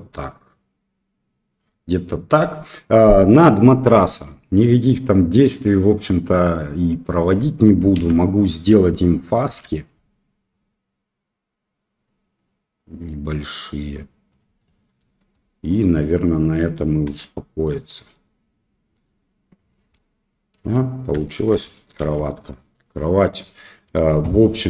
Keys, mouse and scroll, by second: 4.1-7.3 middle drag, 7.9 a, 9.4 ctrl+b, 14.5 middle click, 15.0 Tab, 15.3 middle click, 16.2 click, 17.1 q, 18.1-18.9 middle drag, 19.9-21.0 middle drag, 21.2 shift+middle drag, 22.0 ctrl+s, 22.5 middle click, 23.5 middle drag.